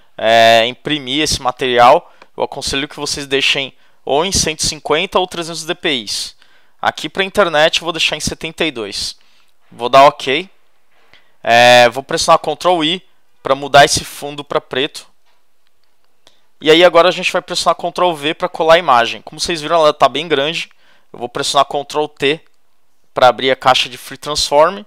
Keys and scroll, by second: 3.3 1, 4.2 5, 4.5 0, 5.7-7.4 typing, 15.0 super+i, 18.0 super+v, 22.2 super+t.